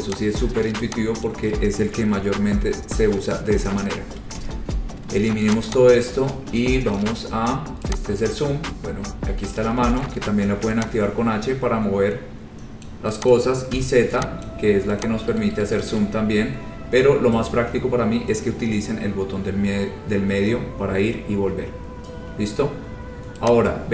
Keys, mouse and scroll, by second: 0.3 click, 0.5-1.0 scroll, 1.4 click, 4.5 Delete, 5.1 scroll, 5.7 click, 5.8 scroll, 6.7 click, 9.7 click, 13.0 click, 13.5 click, 13.9 z, 14.6 click, 15.2 click, 15.8 right click, 16.0 right click, 16.1 right click, 16.7-18.4 scroll, 18.8-19.4 scroll, 20.6-20.9 scroll, 21.3-21.8 scroll, 23.7 click.